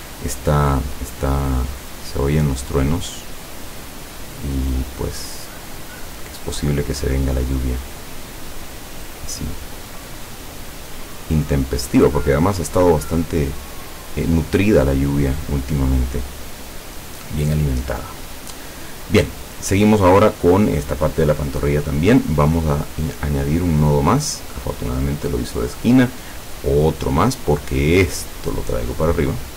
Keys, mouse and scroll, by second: 1.9 click, 4.6-7.3 drag, 9.6-13.5 drag, 20.1 click, 22.9 click, 23.3 click, 26.6 click, 27.3-29.5 drag.